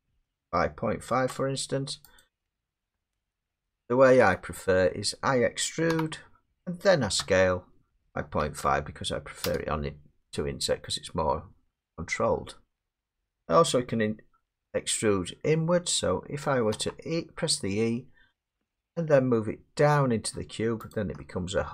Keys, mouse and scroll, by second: 0.1-1.4 typing, 2.2 click, 4.1 ctrl+z, 5.9 e, 7.2 s, 8.2 typing, 9.4 Return, 13.0 middle click, 16.7 e, 20.9 click.